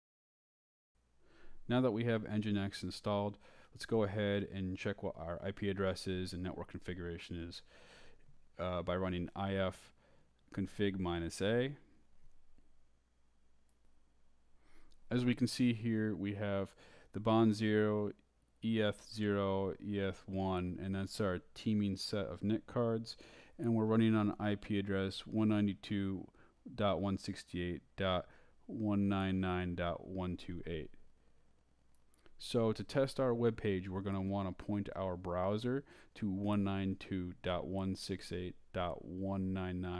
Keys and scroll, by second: 9.8-12.7 typing.